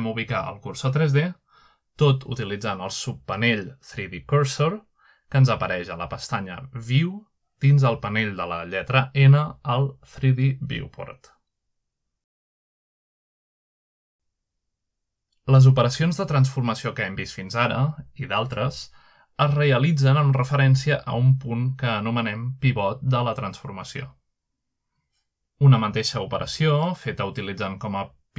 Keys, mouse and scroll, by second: 0.8-1.4 shift+middle drag, 1.3-2.2 shift+right drag, 3.7 click, 9.2-10.5 drag, 11.5-13.5 drag, 14.5 shift+middle click, 18.1-18.8 middle drag, 18.2-19.2 scroll down 1, 18.9-19.5 shift+middle drag, 19.3-20.1 shift+drag, 19.7-20.2 middle drag, 20.9 middle click, 21.0-21.5 scroll down 2, 22.4-23.0 shift+middle drag, 23.0 shift+right click, 23.5 shift+right click, 23.9 shift+right click, 24.8-25.5 middle drag, 25.0-26.0 scroll up 1, 25.9-26.5 shift+middle drag.